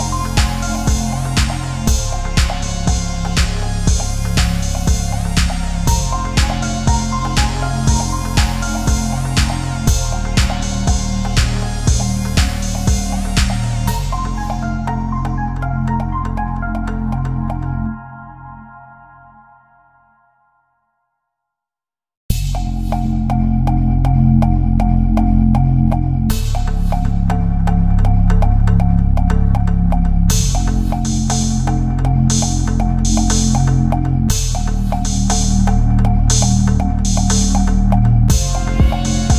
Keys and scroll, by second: 1.8 ctrl+-, 2.1 space, 3.3 ctrl+=, 3.5 space, 3.8 ctrl+=, 3.9 space, 11.1 ctrl+z, 15.7 Down, 19.2 Delete, 21.7 ctrl+-, 22.5 ctrl+-, 22.7 space, 23.2 ctrl+=, 23.9 ctrl+=, 24.0 ctrl+-, 29.7 ctrl+=, 30.3 ctrl+z, 31.5 ctrl+v, 32.2 ctrl+v, 33.1 Left, 33.4 Left, 33.6 Up, 34.0 ctrl+-, 35.3 ctrl+0, 36.8 ctrl+0.